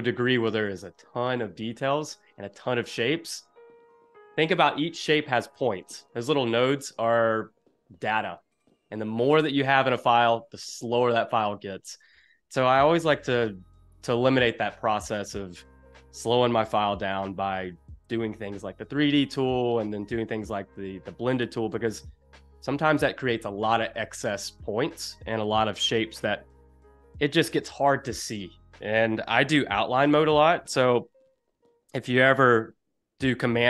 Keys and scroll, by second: 0.3 super+-, 0.8 space, 16.1 super+=, 21.2 space, 32.3 super+y.